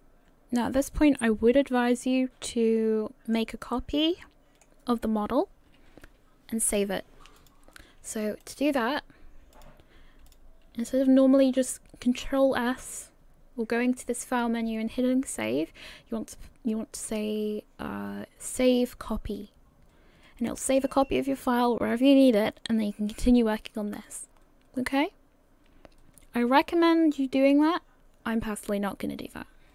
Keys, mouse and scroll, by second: 0.0 middle click, 3.2 middle click, 3.8 middle click, 7.4 click, 8.4 click, 10.3 click.